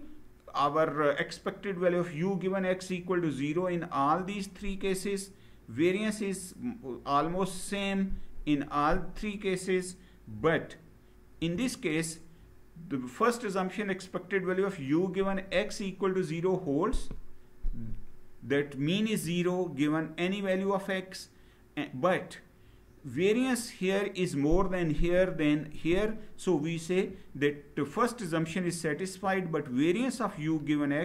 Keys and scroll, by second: 11.1 Down.